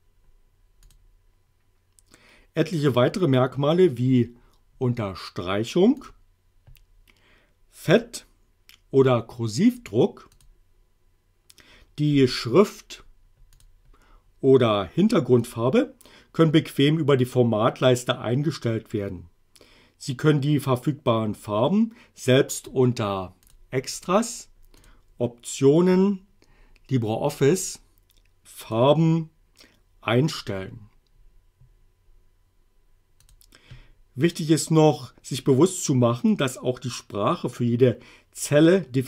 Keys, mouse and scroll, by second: 0.9 click, 6.0 click, 8.0 click, 10.4 click, 13.6 click, 15.5 click, 23.5 click, 24.8 click, 28.7 click, 33.3 click.